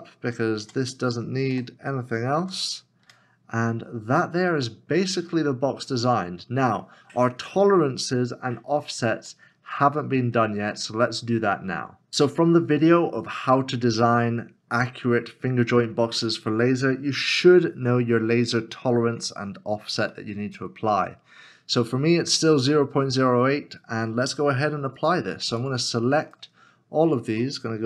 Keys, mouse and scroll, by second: 1.5 a, 3.0 f, 3.6 Tab, 3.8 scroll down 1, 4.7 middle click, 5.7 scroll up 1, 9.3 shift+middle click, 20.1 Return, 20.3 middle click, 21.9 scroll down 1, 22.6 scroll up 1, 26.3 scroll up 1, 26.4 shift+click, 27.1 shift+click.